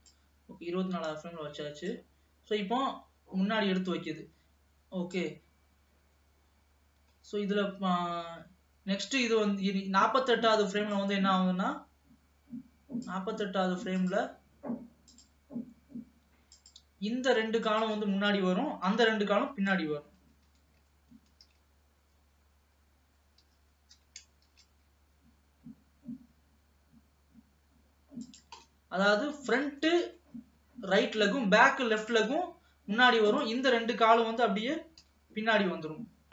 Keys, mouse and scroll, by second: 1.2-1.7 scroll down 2, 2.2-5.0 drag, 11.0-14.6 drag, 15.2 click, 16.7 click, 17.8 shift+click, 19.0 KP_3, 19.8 scroll up 2, 20.6 g, 24.1 g, 28.9 middle click, 29.8 scroll down 2, 30.0 middle click, 30.8-32.1 scroll up 1, 32.1 click, 33.4 shift+click, 35.1 KP_3, 35.8-36.3 scroll up 2.